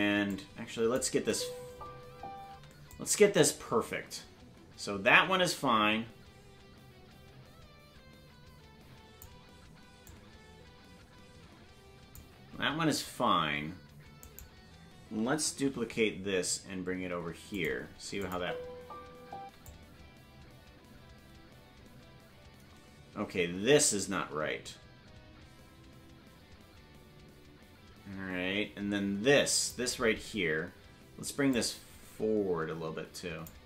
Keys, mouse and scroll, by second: 0.3 click, 1.1 space, 2.9-9.2 drag, 10.0-12.1 drag, 14.2 right click, 15.5 shift+d, 18.2 click, 18.3 space, 19.6-29.7 drag, 19.6 space, 31.5-33.4 drag.